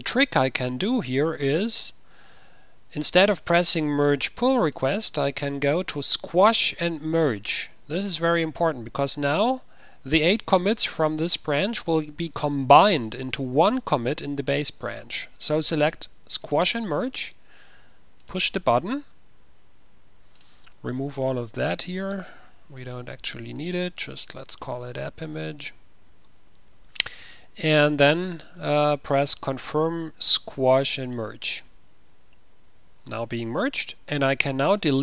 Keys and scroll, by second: 21.9 ctrl+a, 24.5-25.3 typing, 30.5 typing.